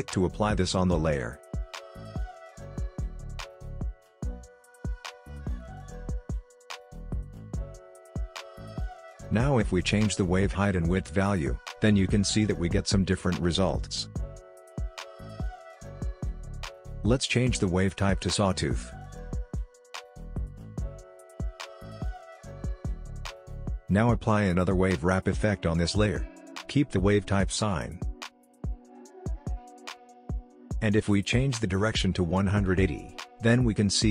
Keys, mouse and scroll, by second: 1.1-1.6 scroll down 1, 1.6-2.1 scroll up 1, 2.7-3.5 scroll down 1, 3.5-4.5 scroll up 1, 4.5 s, 5.2-6.6 drag, 6.6-7.1 scroll down 1, 8.5-14.3 drag, 14.3 space, 16.6-23.6 drag, 29.7-34.1 drag, 31.4 click.